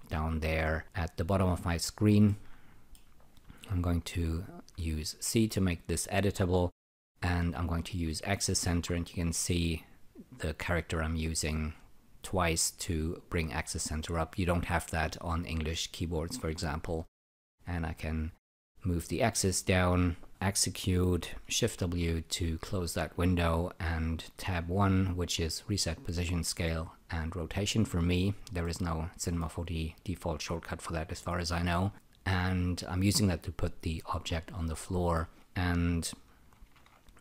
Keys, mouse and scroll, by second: 2.2 alt+middle click, 4.7 c, 8.0 ä, 8.2 ä, 17.3 click, 20.3 click, 21.7 shift+w, 24.3 Tab, 24.5 1, 28.6 alt+middle click, 30.0 alt+click, 31.9 alt+middle click, 34.7 alt+middle click, 36.6 Tab, 36.7 w.